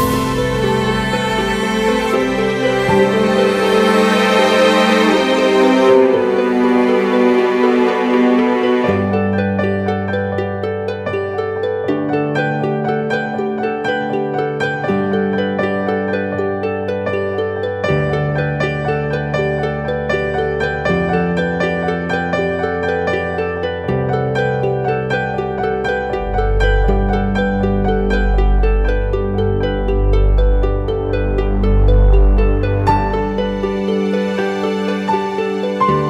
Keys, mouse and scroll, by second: 8.1 double click, 15.7 e, 25.9 double click.